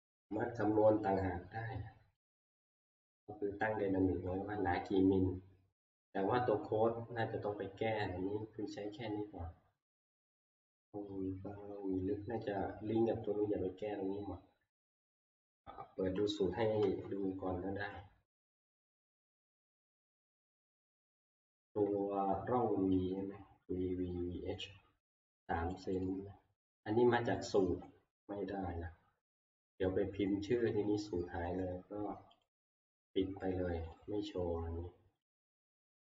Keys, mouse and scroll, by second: 2.3 click, 2.5 click, 2.5 scroll, 3.1 click, 15.7 middle click, 16.9 F11, 20.1 click, 22.8 middle click, 22.9 middle click, 23.0-23.3 scroll, 25.9 click, 26.1 click, 30.6 Escape, 32.5 click, 33.9 click, 35.4 click.